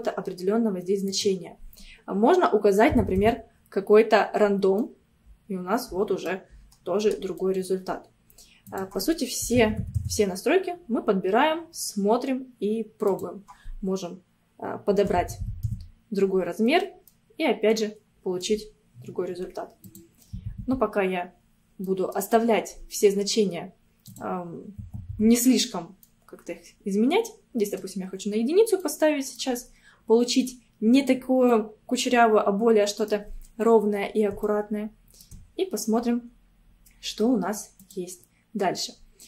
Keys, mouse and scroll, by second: 1.1-4.1 drag, 4.5 scroll down 2, 4.8-6.6 middle drag, 6.6-7.1 scroll up 2, 7.4-8.7 middle drag, 8.7-11.7 drag, 13.1-16.3 drag, 16.9 scroll down 1, 17.2-18.8 middle drag, 18.8-19.9 scroll up 1, 19.9-21.9 drag, 21.9-24.1 middle drag, 24.1-26.1 drag, 26.1-28.2 middle drag, 28.2-28.8 scroll up 1, 28.8 middle click, 29.7-30.5 scroll up 3, 31.2 scroll down 2, 31.5-33.7 middle drag, 33.7-34.1 scroll down 1, 34.5-36.0 shift+middle drag, 36.0 scroll down 2, 37.8-39.2 drag.